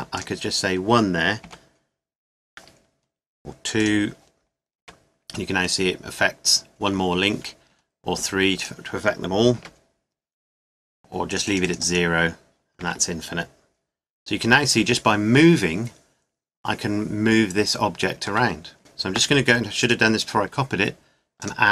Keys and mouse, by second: 0.1-2.0 drag, 1.4 g, 3.8 click, 4.8 g, 5.6-7.6 middle drag, 8.6-10.3 drag, 9.5 g, 11.3-12.7 drag, 12.8 g, 19.8-21.7 middle drag.